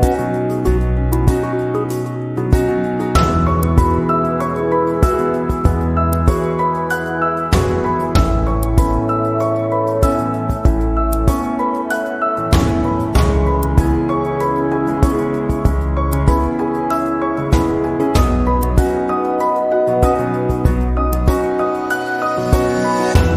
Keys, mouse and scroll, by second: 2.6 click, 8.0-8.4 scroll up 1, 8.6 middle click, 10.3 right click, 12.4 click, 13.2 click, 13.8 click, 14.1 click, 14.4 click, 16.0 click, 16.9 click, 17.9-18.3 scroll down 1, 18.3 scroll up 1, 18.6 middle click, 22.1 click.